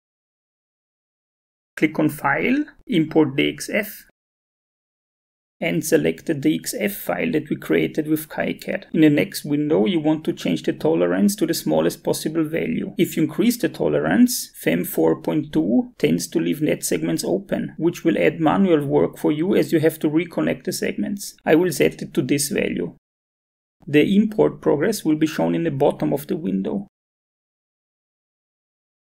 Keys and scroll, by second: 15.0 BackSpace, 15.2 1.